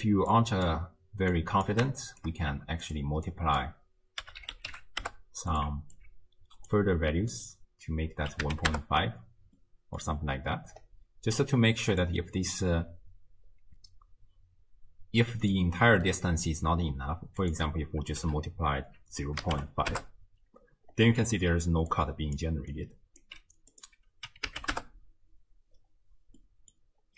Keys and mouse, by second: 0.3-0.8 drag, 1.3-1.7 drag, 2.1 shift+click, 3.3-5.6 drag, 3.3 g, 6.0-6.7 alt+drag, 7.3-8.7 drag, 9.6-10.1 middle drag, 11.9-15.6 drag, 16.2 middle click, 17.4-19.9 drag, 21.3 middle click, 21.5-22.7 d, 21.9 click, 22.7 click, 23.2 d, 23.3 d, 23.4 d, 23.7-24.8 drag, 26.4-26.7 middle drag.